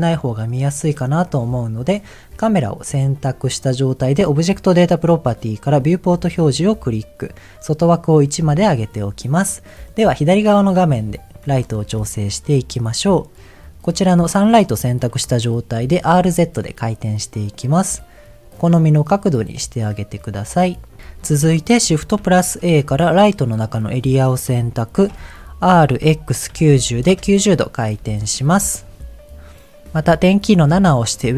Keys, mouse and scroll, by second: 0.7 click, 2.8 click, 4.2 click, 5.7 click, 6.5-7.6 scroll down 2, 7.8 click, 9.6 middle click, 10.5-10.9 scroll down 2, 11.4 scroll down 3, 11.5 shift+middle click, 12.0 middle click, 13.6 click, 13.9-15.0 middle drag, 22.1 shift+a, 24.6 shift+middle click, 25.1 scroll up 1, 25.6 r, 26.0 x, 26.5 KP_9, 26.7 KP_0, 27.1 Return, 28.2-29.3 scroll down 1, 30.6 KP_7.